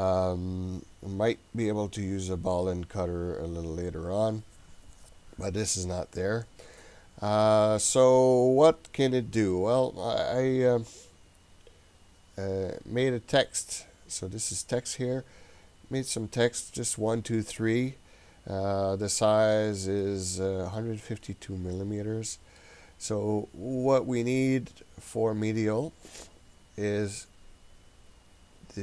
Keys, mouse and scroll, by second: 13.8 click, 20.0-22.6 middle drag, 28.1-28.8 scroll down 16.